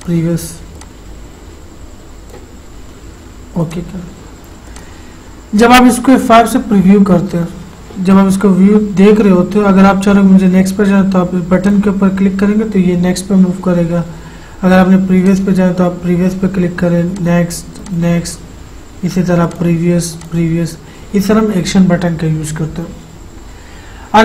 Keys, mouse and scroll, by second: 0.2-3.9 drag, 6.9 F5, 11.8 click, 15.6 click.